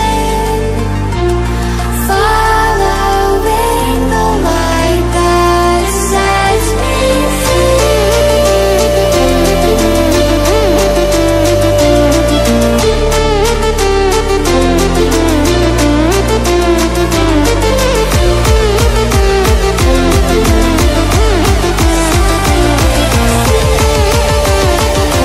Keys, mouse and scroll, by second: 14.9 scroll down 1, 17.4-23.9 drag, 24.6 scroll down 1.